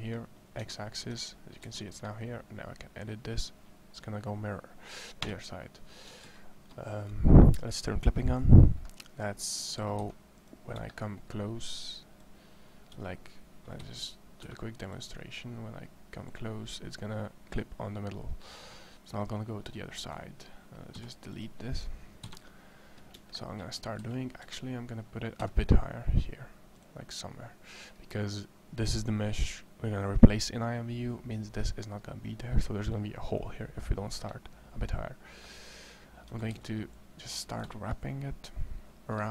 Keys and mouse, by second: 0.4 Tab, 0.8 Tab, 1.5 Tab, 5.0 Escape, 6.0 ctrl+z, 9.7 a, 9.8 c, 12.7 r, 14.3 e, 14.8-17.2 drag, 20.8 x, 22.0 KP_1, 23.6 a, 23.8 c, 25.2 g, 36.1 a, 36.3 c.